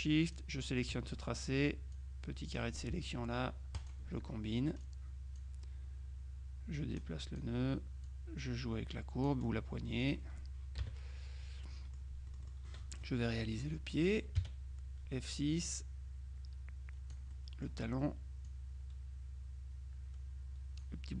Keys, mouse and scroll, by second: 0.3 shift+click, 1.0 click, 2.0 click, 3.9 click, 4.9 click, 6.9-8.1 drag, 8.1-10.0 drag, 10.1 click, 10.9 KP_Subtract, 11.7-13.1 middle drag, 14.5 F6, 15.7-17.7 drag, 17.4 middle click, 18.6-21.2 drag.